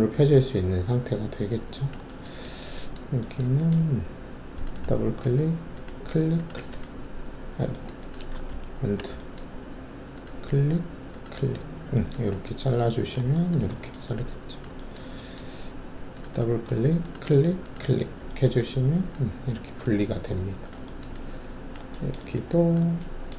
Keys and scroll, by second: 8.4 ctrl+alt+z.